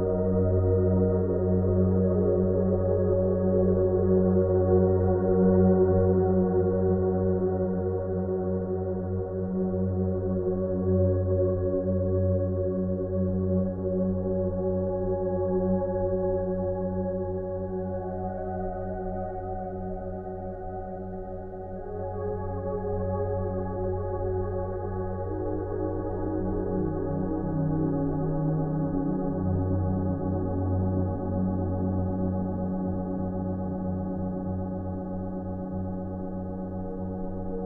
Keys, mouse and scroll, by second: 0.6 scroll up 1, 2.3-2.7 scroll down 1, 2.7 click, 11.3 click, 16.1 ctrl+alt+z, 17.0-23.3 drag, 21.5-23.1 drag, 23.3-23.7 scroll up 1, 25.1-26.1 typing, 27.5 click, 32.1 Return, 32.6 alt+i, 33.0-34.1 typing, 34.8-35.7 click, 35.8-36.1 scroll up 1, 36.1 scroll down 1.